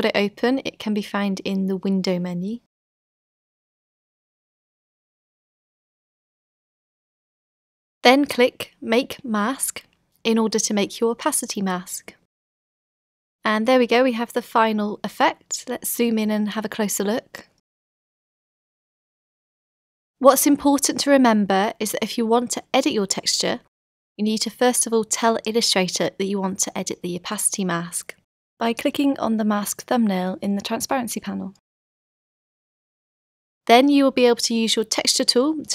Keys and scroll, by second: 13.8 z, 19.9 super+0, 21.3 v.